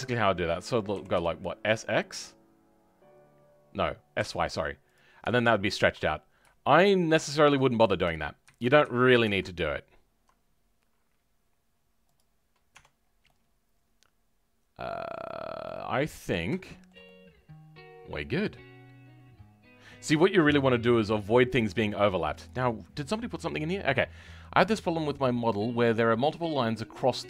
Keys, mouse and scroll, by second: 8.7 ctrl+z, 12.0 click, 12.9 scroll down 2, 13.2-15.3 middle drag, 15.3 scroll up 2, 15.6-27.2 middle drag.